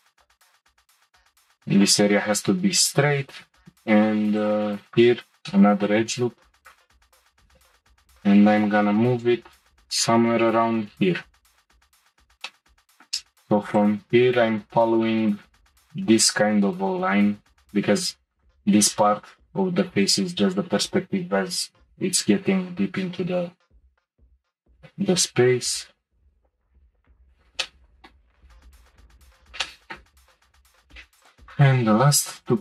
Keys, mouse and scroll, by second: 3.5 ctrl+r, 5.5 click, 5.5-6.6 middle drag, 6.6 click, 7.2 shift+click, 7.5 g, 12.1 shift+middle click, 12.5-13.7 middle drag, 13.7 click, 14.4-15.0 scroll up 2, 15.0-18.1 shift+middle drag, 24.8 g, 26.6 shift+middle click, 27.2 click, 27.6 click, 27.9 middle click, 28.7 middle click, 28.8 g, 29.3-29.7 scroll down 1, 29.7 shift+middle click, 31.2 shift+click, 32.4 click.